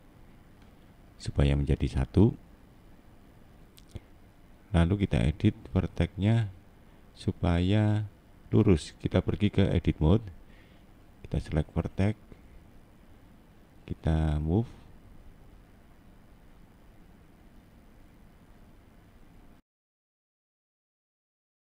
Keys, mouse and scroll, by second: 0.1 middle click, 2.3 scroll up 2, 2.8 middle click, 4.0 click, 4.9 middle click, 5.4 middle click, 8.9 click, 10.2 middle click, 11.2 middle click, 12.0 click, 13.4 right click, 14.9 click, 16.0 click.